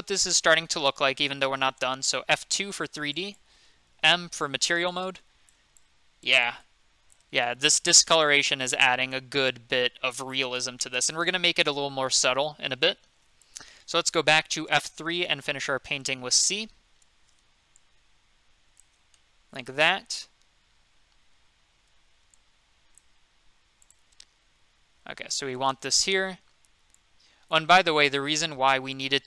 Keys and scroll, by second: 2.2 F2, 4.0 m, 14.3 F3, 15.9 c, 19.4 c.